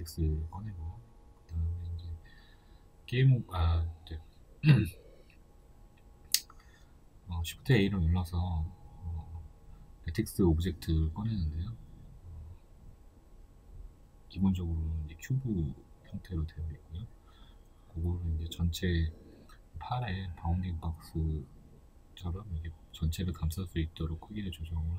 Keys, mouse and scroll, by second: 0.0-7.4 middle drag, 2.6 shift+a, 3.3-3.8 scroll down 2, 5.8 KP_3, 6.9-7.4 scroll up 2, 7.4 g, 8.7 click, 8.9 shift+middle click, 9.4 s, 10.9 click, 11.1 shift+middle click, 11.4 scroll up 1, 12.3 g, 13.9 KP_1, 14.9-18.9 shift+middle drag, 15.1-16.1 scroll up 2, 16.1 g, 18.9 click, 19.2-21.7 shift+middle drag, 21.7 click, 24.1-24.9 drag.